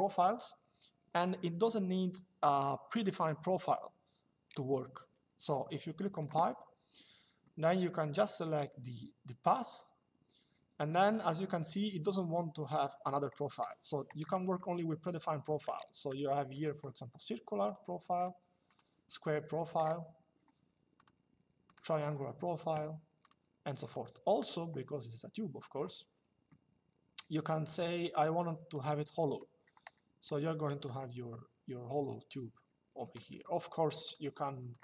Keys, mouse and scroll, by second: 5.9 click, 9.2 click, 14.3 shift+middle click, 16.2 click, 17.4 click, 20.7 click, 22.9 click, 28.4 click, 30.7 shift+middle click, 33.7 click.